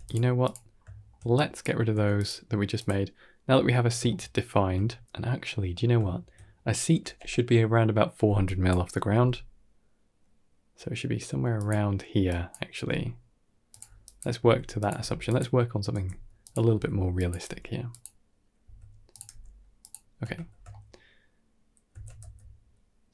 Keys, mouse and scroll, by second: 0.6 scroll down 1, 0.8 shift+middle click, 1.2 click, 1.8 x, 2.6 click, 3.7 scroll up 2, 3.9 shift+middle click, 5.6 scroll up 2, 5.9 shift+middle click, 6.7 Tab, 8.3 click, 9.0 g, 12.2 click, 12.6 g, 13.9 click, 14.2-17.3 typing, 18.5 s, 19.2 g, 20.1 Tab, 20.4 scroll down 2, 20.6 shift+middle click, 21.8 shift+d.